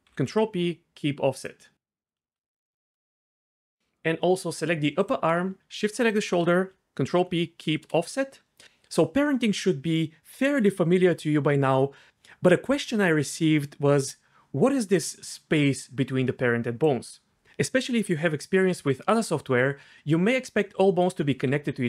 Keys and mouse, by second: 0.1 ctrl+p, 7.1 ctrl+p, 15.0-17.3 d, 15.5 click, 17.1 click, 19.8 d, 21.5-21.8 d.